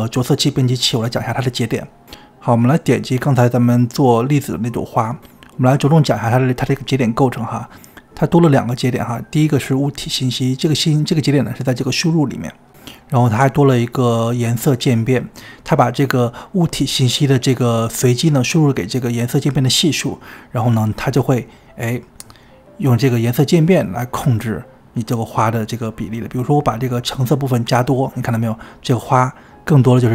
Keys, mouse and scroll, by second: 0.0-3.6 drag, 9.0-12.1 drag, 29.0-30.1 middle drag.